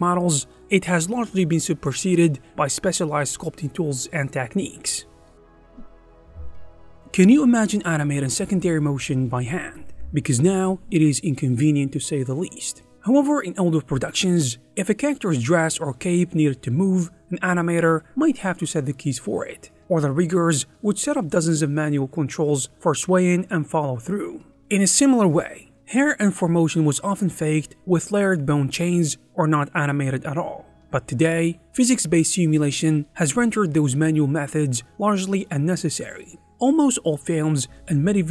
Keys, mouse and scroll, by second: 1.4 ctrl+a, 1.8 g, 3.1 f, 4.7 Escape.